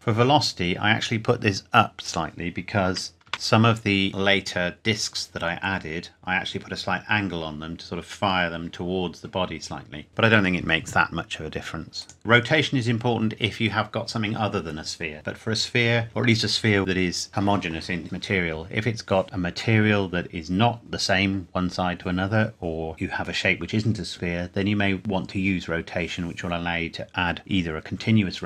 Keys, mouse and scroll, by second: 2.1 click, 2.9 KP_2, 3.3 KP_Enter, 11.1 scroll up 1, 11.3-11.7 scroll down 1, 12.0 click.